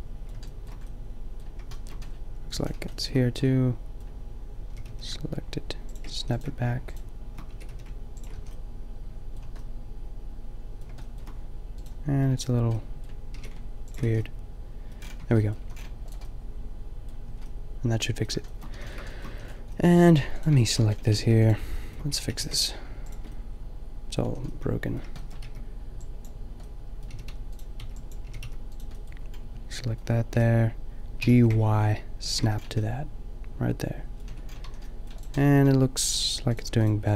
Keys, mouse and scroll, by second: 2.9-4.6 middle drag, 4.6 g, 6.1 a, 7.5 g, 8.3 a, 11.9-13.4 drag, 13.4 g, 14.0 a, 15.1 Tab, 15.5 a, 17.3 Tab, 18.7 a, 19.3 a, 21.2 x, 22.2 g, 23.6 middle click, 23.9 middle click, 24.2 a, 24.8 click, 25.4 b, 26.9 middle click, 27.1 g, 27.7-28.7 drag, 27.8 b, 28.2 g, 29.0 click, 29.3 middle click, 30.4 g, 32.4 a, 32.6 middle click, 34.2 Tab, 34.6 a, 35.5 Tab.